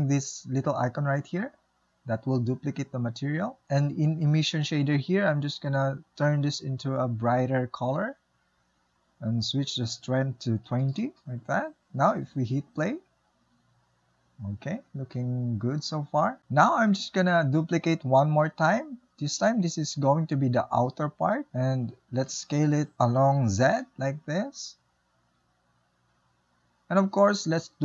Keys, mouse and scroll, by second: 1.6-7.1 drag, 11.1 click, 12.3-16.1 shift+middle drag, 16.1 space, 16.4 click, 18.4 shift+d, 24.3 s.